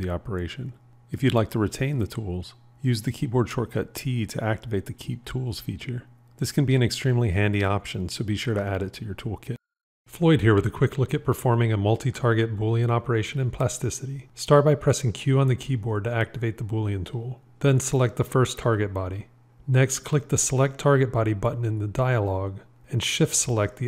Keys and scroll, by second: 2.6 q, 4.0 t, 16.0 q.